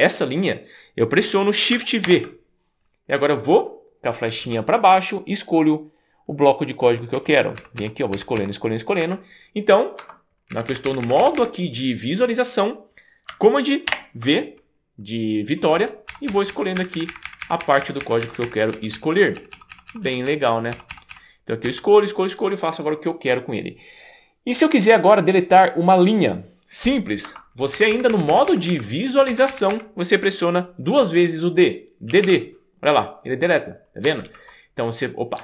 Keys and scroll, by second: 2.1 shift+v, 4.5 Down, 4.9 Down, 7.1 Down, 7.6 Down, 7.8 Down, 8.1 Down, 8.4 Down, 9.0 Up, 10.0 Escape, 10.5 Up, 10.7 Up, 10.8 Up, 11.1 Up, 11.2 Up, 11.4 Up, 13.9 shift+v, 15.8 Down, 16.3 Down, 16.5 Down, 16.8 Up, 16.9 Up, 17.1 Up, 17.2 Up, 17.5 Up, 17.6 Up, 17.8 Up, 18.0 Up, 18.2 Up, 18.4 Up, 18.7 Down, 18.9 Down, 19.4 Down, 19.5 Down, 19.9 Down, 20.7 Down, 20.9 Down, 21.1 Down, 21.7 Down, 27.3 Escape, 27.8 Up, 27.9 Up, 28.1 Up, 28.3 Up, 28.5 Up, 28.7 Up, 29.3 Up, 29.5 Up, 29.7 Up, 32.1 d, 32.3 d, 34.5 super+z.